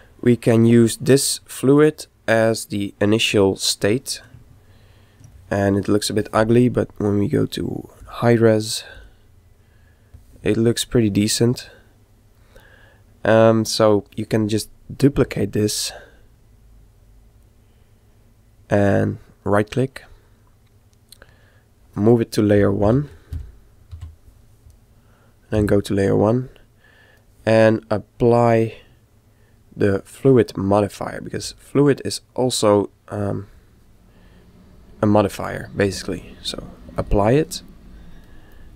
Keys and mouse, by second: 3.8-6.9 middle drag, 8.0 click, 10.7-12.5 middle drag, 16.5 shift+d, 22.9 m, 25.6 1, 26.5-28.2 middle drag, 28.3 click, 31.4 click, 36.0-38.7 drag, 38.7 middle click.